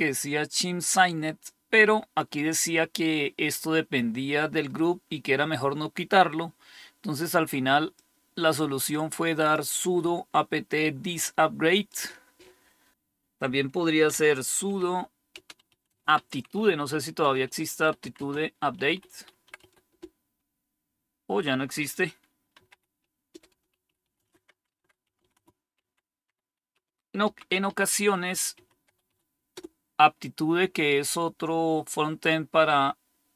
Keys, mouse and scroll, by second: 13.8-20.4 typing, 22.2-29.5 typing.